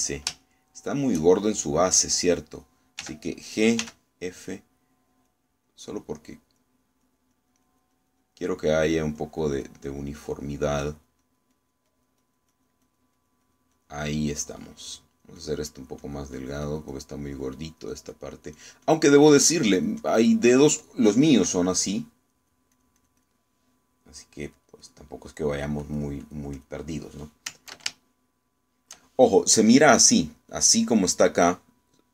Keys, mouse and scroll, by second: 0.5 shift+middle click, 1.5 shift+middle click, 4.1 g, 4.9 f, 5.4 click, 6.3 click, 7.1 click, 7.7 click, 8.5-11.3 drag, 11.6-13.9 drag, 16.1-17.4 drag, 18.4-19.9 drag, 23.4 click, 23.8 click, 25.6 click, 26.3 click, 26.9 click, 27.3 click, 29.1 ctrl+shift+middle click.